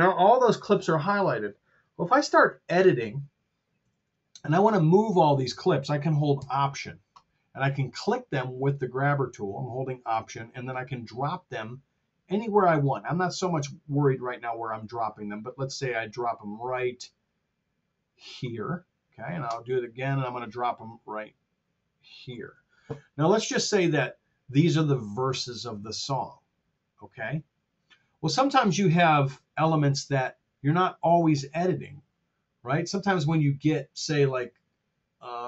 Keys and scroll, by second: 3.7 r.